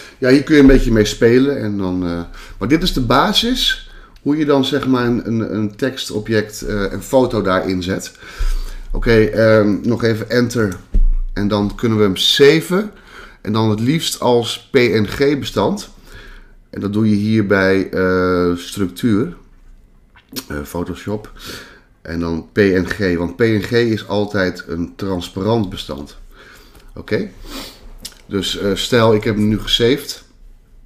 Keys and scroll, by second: 10.6 Return.